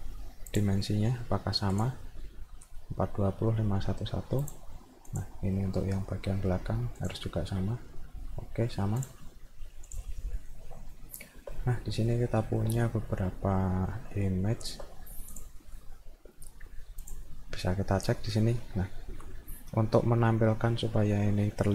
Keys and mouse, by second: 0.5 click, 1.7 click, 4.5 click, 5.1 click, 7.0 click, 9.9 click, 10.4 middle click, 11.0 alt+middle click, 11.6 middle click, 12.1 alt+middle click, 13.4-14.7 alt+middle drag, 15.3 click, 17.1 click, 17.8 middle click, 18.6 middle click, 19.0 middle click.